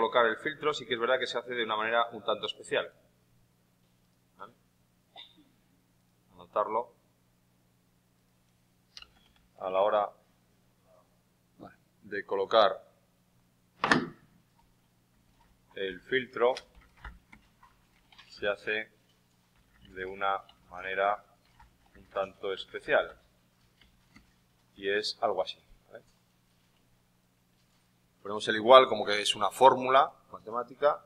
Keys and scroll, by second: 8.7-10.2 typing, 23.7 shift+., 24.0 space, 24.7 ctrl+v.